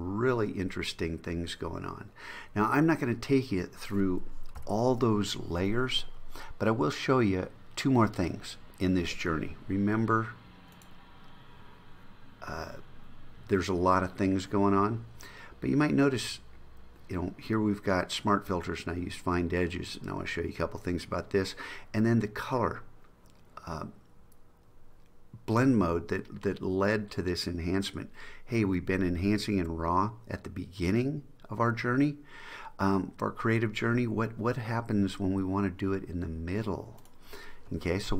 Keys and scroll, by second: 4.7 super+0.